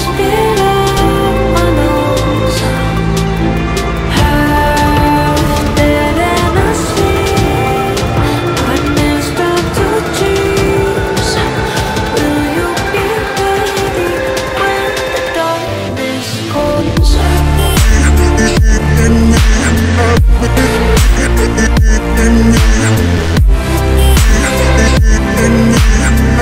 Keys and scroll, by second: 3.0 F3, 3.3 Escape, 3.7 F3, 3.8 Escape, 4.2 Delete, 5.4 shift+F2, 5.6 Escape, 23.2 F3, 24.8 shift+F2, 25.2 Escape.